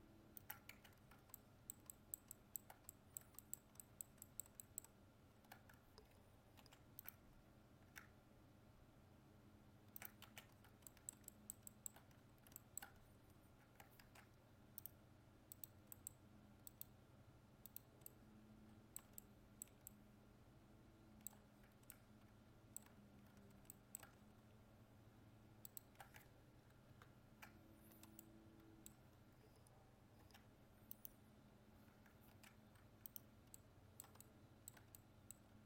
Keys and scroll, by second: 6.7 ctrl+r, 14.0 ctrl+Tab, 26.9 ctrl++, 32.3 ctrl+Tab.